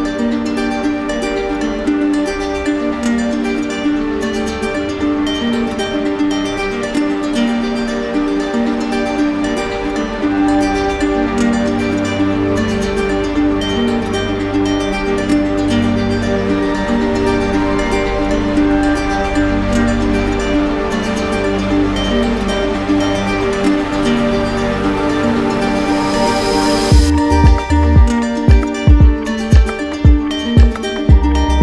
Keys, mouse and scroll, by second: 1.3 ctrl+click, 2.1 right click, 2.1 ctrl+click, 2.8 shift+right click, 3.5 right click, 5.4 right click, 6.7 click, 8.2 click, 8.4 ctrl+z, 10.9 click, 11.5 click, 11.5 right click, 12.2 right click, 13.0 right click, 14.8 alt+click, 15.0 ctrl+z, 16.3 right click, 17.7 ctrl+z, 20.7 right click, 21.2 click, 21.9 shift+right click, 23.6 right click, 24.7 right click, 25.4 ctrl+click, 25.8 ctrl+click, 26.2 ctrl+click, 26.6 ctrl+click, 27.5 right click, 28.2 right click, 28.5 right click, 29.0 shift+right click, 29.1 shift+right click, 30.2 right click, 30.9 right click.